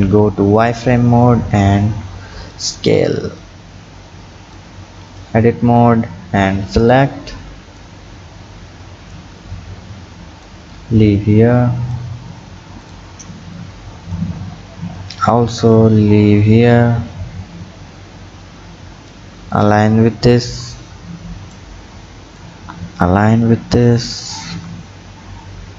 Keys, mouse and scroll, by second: 1.2 s, 3.5 click, 4.9 Tab, 5.1 click, 6.1 b, 7.8-9.4 drag, 9.4-10.4 scroll up 5, 10.4-12.4 drag, 12.4-12.8 scroll down 3, 12.8 click, 13.2 b, 15.0-18.0 drag, 19.5 click, 20.5 b, 22.4-25.4 drag.